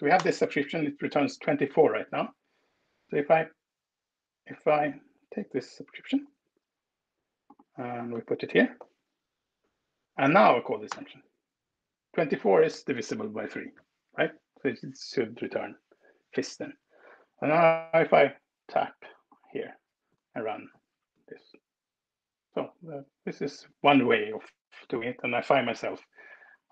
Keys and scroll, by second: 4.8 ctrl+w, 5.8 super+c, 8.0 BackSpace, 8.8 super+v, 10.8 alt+Return, 19.8 alt+Return, 22.8 Escape.